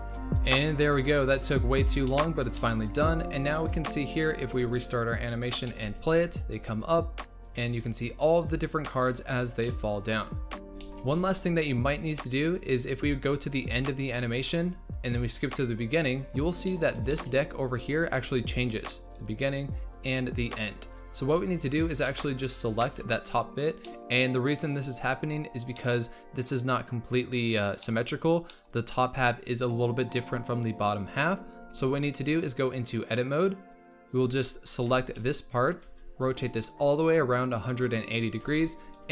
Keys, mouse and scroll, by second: 0.0 ctrl+space, 0.1 Tab, 2.0 middle click, 2.5 scroll down 1, 2.6 middle click, 3.2 Tab, 5.4 click, 5.7 middle drag, 5.9 space, 6.9-7.3 scroll up 1, 7.6-11.4 middle drag, 11.4-12.4 scroll down 2, 12.4 scroll up 1, 12.7-14.5 scroll down 1, 14.5-16.7 drag, 16.7-17.3 middle drag, 17.3-18.1 scroll up 3, 19.2-21.3 drag, 22.0-23.0 middle drag, 23.0 scroll up 2, 23.8-25.0 middle drag, 25.0 scroll up 1, 31.3-31.6 scroll down 2, 31.6 Tab, 34.9 l, 35.8 r, 38.4 Tab, 38.7-39.1 scroll down 3.